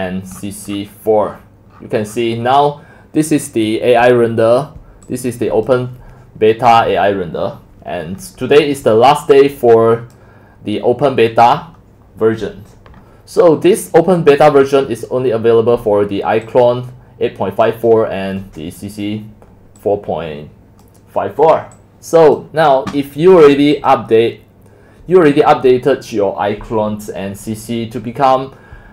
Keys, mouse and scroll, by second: 0.0 scroll, 0.1 scroll, 0.3-1.3 scroll down 23, 1.3 scroll up 7, 1.5-1.9 scroll down 10, 1.9 scroll, 2.1 scroll down 1, 2.1 scroll down 1, 2.2 scroll down 1, 2.2 scroll down 1, 2.2 scroll, 5.1-5.7 scroll down 11, 5.7 scroll up 10, 5.7-8.0 drag, 9.6-15.0 drag, 15.0-15.4 scroll down 1, 15.4-16.5 scroll up 2, 16.5-17.5 scroll up 1, 17.5 scroll up 1, 17.6-21.5 drag, 21.8 click, 23.6 click, 24.3 drag, 24.8-28.9 drag.